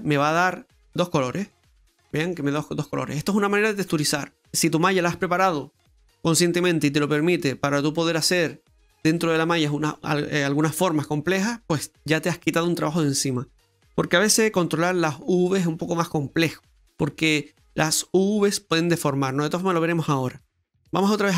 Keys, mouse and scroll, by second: 0.3 middle click, 1.5 Tab, 1.8 middle click, 20.6 Tab, 20.6 middle click.